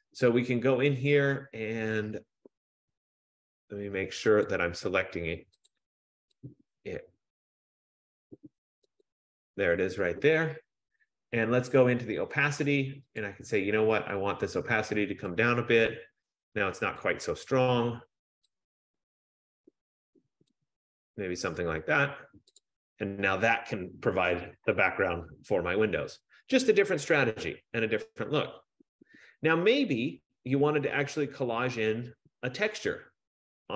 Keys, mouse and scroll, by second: 4.6 click, 5.2 F15, 5.9 click, 6.8 click, 9.3 click, 13.5 click, 15.3 click, 17.2 click, 20.6 click, 22.9 click, 27.4 scroll.